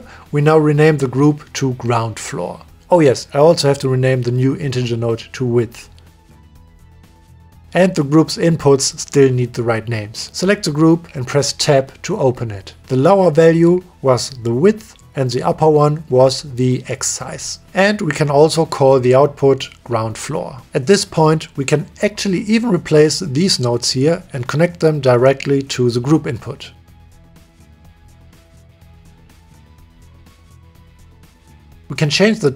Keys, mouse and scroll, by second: 0.4 click, 0.7 shift+click, 1.7 middle click, 3.6 click, 5.2 click, 5.8-7.7 drag, 8.1 click, 9.0 click, 9.4 click, 10.4 Tab, 11.3 click, 12.2 click, 13.2 click, 14.5 click, 15.6 click, 15.8-17.1 drag, 17.4 click, 18.1 click, 18.8 click, 19.3-21.1 drag, 21.7 click, 22.3 click, 23.0 click, 25.5 click, 26.5 click, 26.8 click, 27.7 drag, 28.4-28.8 drag, 29.3-29.6 drag, 30.4 click, 30.7-31.1 drag, 31.4 click.